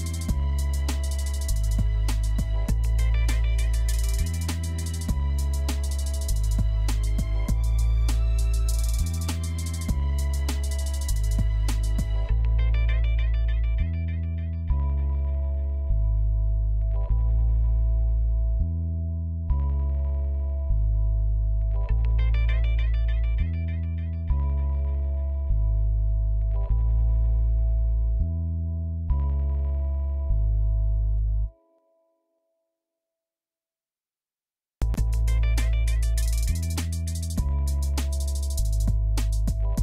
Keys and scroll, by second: 2.1-3.3 typing, 12.5-13.7 typing, 23.0-24.1 typing, 34.4 1.